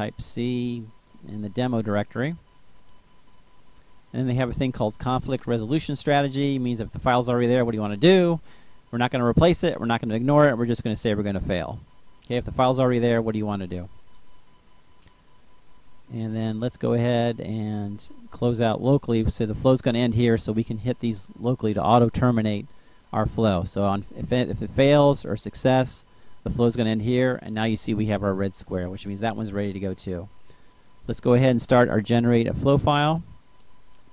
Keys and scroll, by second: 0.0-1.4 typing.